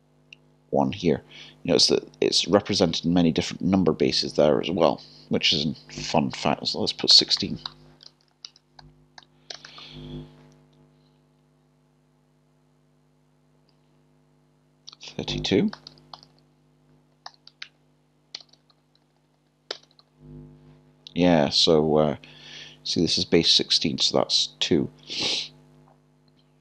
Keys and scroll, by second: 7.1 typing, 17.1 typing, 18.4 BackSpace.